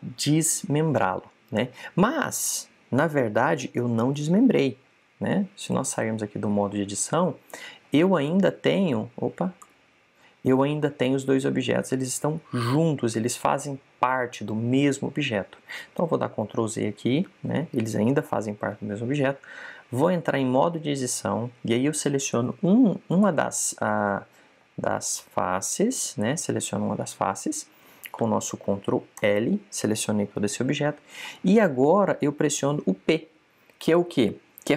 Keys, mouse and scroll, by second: 3.2 click, 5.1 right click, 6.6 a, 9.0 right click, 10.5 Tab, 17.3 super+z, 20.3 z, 21.0 Tab, 23.0 right click, 26.0 click, 26.8 right click, 30.1 ctrl+l, 33.5 p.